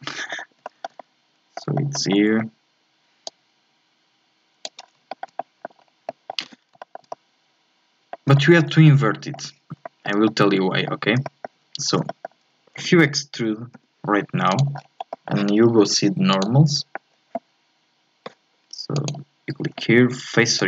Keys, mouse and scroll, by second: 3.2-4.8 drag, 4.8 scroll down 2, 5.1 shift+middle click, 5.8 scroll up 2, 6.1 middle click, 6.4 z, 6.8-8.7 shift+middle drag, 8.7 scroll up 1, 8.9 middle click, 9.6 scroll up 1, 9.8-11.7 shift+middle drag, 11.7 scroll up 2, 12.1-13.4 shift+middle drag, 13.4 e, 14.8-15.1 scroll down 4, 15.1-16.3 middle drag, 16.3 click, 18.3 click.